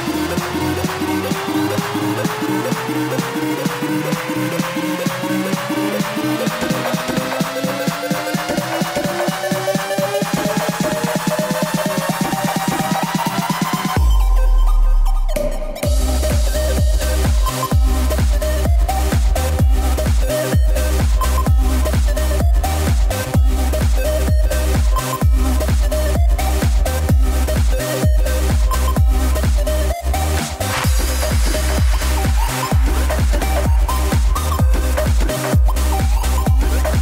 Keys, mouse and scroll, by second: 0.7 g, 1.9 r, 3.7 g, 5.1 click, 5.9 click, 6.7 g, 8.4 KP_0, 10.7 KP_7, 11.9 g, 13.4 KP_0, 15.2 click, 27.3 click, 29.5 shift+d, 30.9 r, 32.5 g, 33.8 r, 35.7 g, 36.6 r.